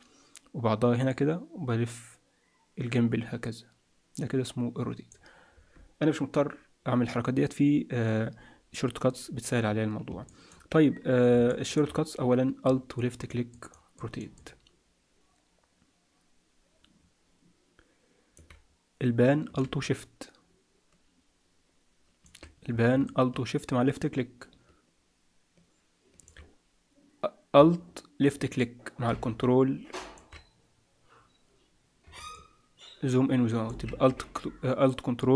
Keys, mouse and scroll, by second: 1.1 click, 10.3 middle click, 11.0-11.5 scroll up 3, 11.5 shift+middle click, 12.9 middle click, 13.5 middle click, 13.9 middle click, 14.3 middle click, 19.9 shift+middle click, 23.0 shift+middle click, 28.5 middle click, 32.3 ctrl+middle click, 35.1 ctrl+middle click.